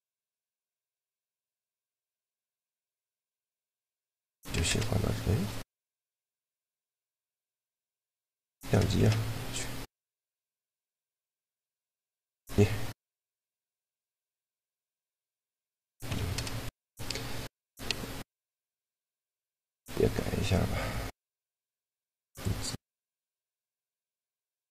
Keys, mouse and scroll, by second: 1.3-4.4 middle drag, 4.4 ctrl+alt+KP_0, 7.4 Tab, 8.8 shift+a, 12.1-13.7 drag, 13.5 right click, 14.6 click, 14.7 Tab, 15.9 Tab, 16.1 ctrl+alt+KP_0, 19.1-24.7 drag, 19.7-22.5 middle drag, 19.7-22.5 right drag, 22.9 middle click, 22.9 right click.